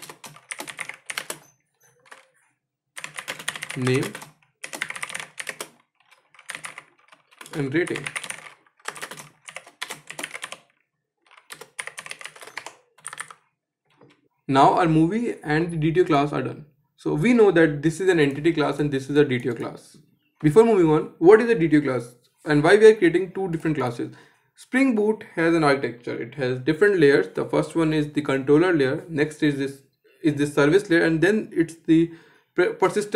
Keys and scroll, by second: 12.1 Escape.